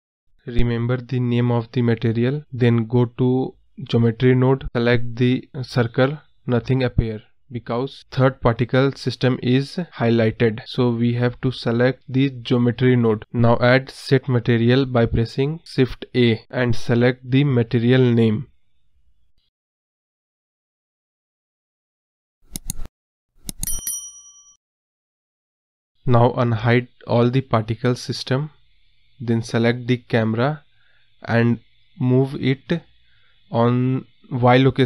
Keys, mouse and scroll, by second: 3.2-6.7 drag, 10.5-13.5 drag, 14.9-18.9 drag, 19.5-19.9 scroll down 6, 19.9 click, 20.3 click, 20.5 KP_0, 20.7 scroll up 5, 21.5 click, 22.7-24.0 drag, 24.0 space, 25.6 space, 27.6 click, 29.0-29.7 drag, 30.2-30.6 drag, 30.6-31.3 scroll down 1, 31.3 scroll up 1, 32.5 click, 34.4-34.8 drag.